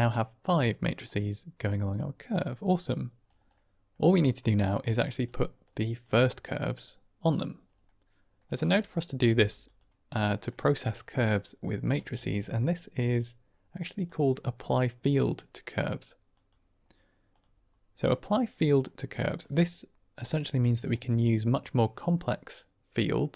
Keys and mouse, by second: 0.6 click, 2.1 click, 3.4 click, 3.4 middle click, 4.5 click, 5.1 drag, 5.7 click, 7.7 middle click, 8.6-9.0 drag, 9.2 g, 10.2 middle click, 12.0 shift+a, 18.1 middle click, 20.8-23.3 drag.